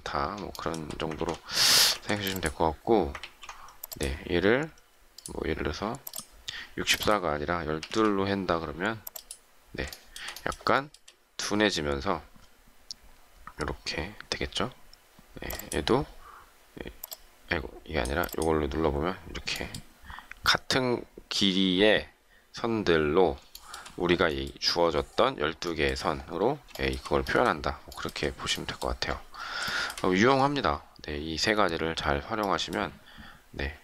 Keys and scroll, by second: 3.2 ctrl+z.